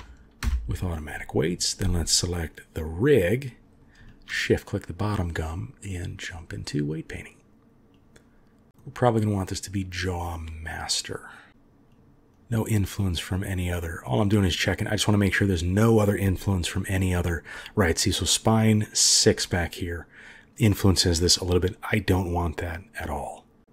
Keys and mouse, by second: 2.4 click, 4.1 shift+click, 5.3-6.4 drag, 7.9 click, 8.7 middle click, 10.5-11.5 middle drag, 12.6-16.9 drag, 17.0 shift+click.